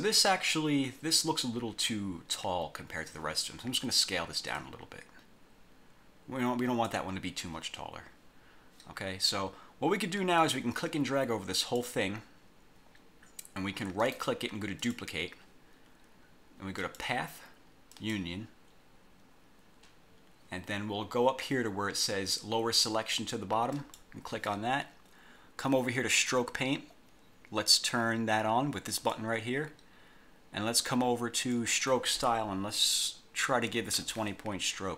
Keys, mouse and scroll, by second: 0.4 click, 4.7-7.2 ctrl+drag, 10.6-12.1 drag, 14.2 right click, 15.0 click, 17.0 click, 18.0 click, 23.9 click, 26.2 click, 29.1 click, 31.6 click, 33.7-34.6 typing.